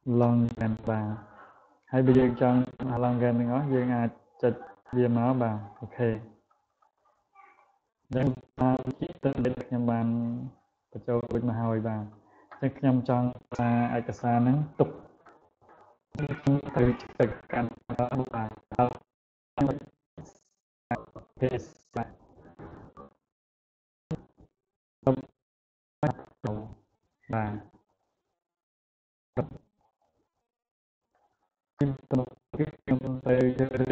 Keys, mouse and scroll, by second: 28.1 click.